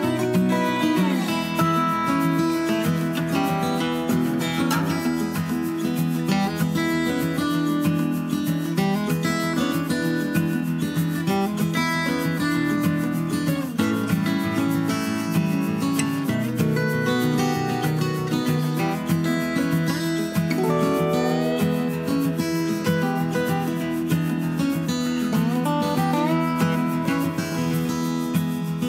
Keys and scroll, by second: 2.2 d, 5.2 Up, 5.5 Left, 5.9 Right, 9.2 super+d, 17.2 super+d.